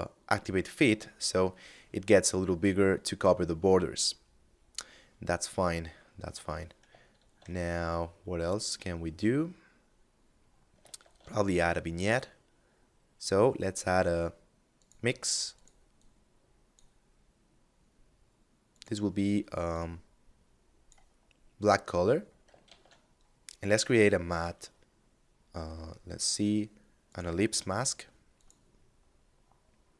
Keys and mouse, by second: 2.8 middle click, 6.3 shift+a, 10.1 shift+a, 14.0 click, 17.9 click, 21.1 middle click, 21.8 shift+a, 26.1 click.